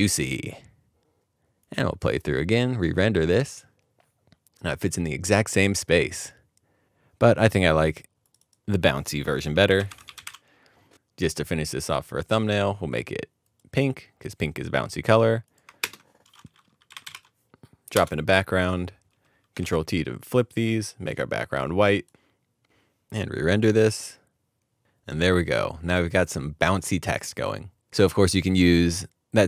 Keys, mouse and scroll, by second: 6.8 typing, 8.4 typing, 9.6-10.7 typing, 14.2 typing, 14.2 middle click, 15.8 ctrl+space, 16.7-17.6 typing, 17.9 Return, 19.6 ctrl+t.